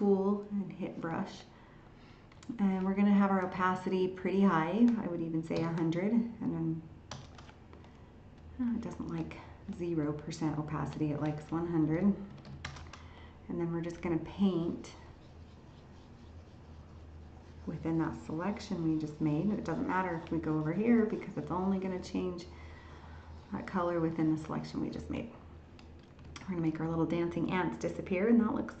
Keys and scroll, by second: 26.4 ctrl+h.